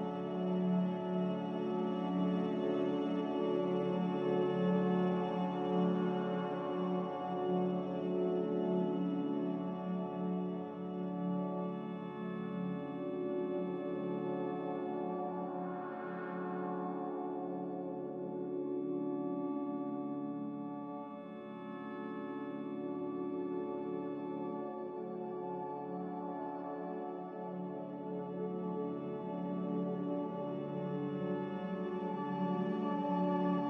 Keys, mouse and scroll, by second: 0.2 ctrl+z, 0.6 ctrl+z, 4.3 a, 4.8 ctrl+z, 5.3 ctrl+z, 10.4 ctrl+s, 18.1 click, 18.3 click, 20.2 ctrl+c, 20.9 ctrl+r, 23.6 Delete, 27.2 m, 28.0 b.